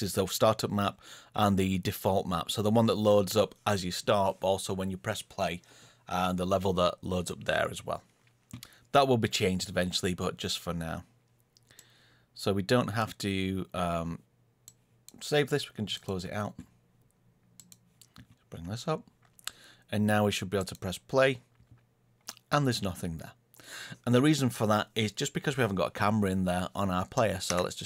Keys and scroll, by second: 27.4 Escape.